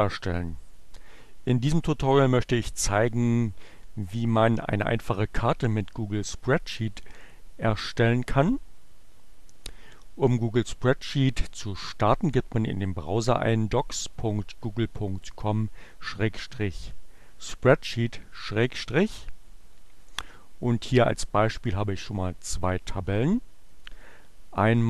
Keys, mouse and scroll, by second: 22.8 click, 23.5 click, 24.5 click.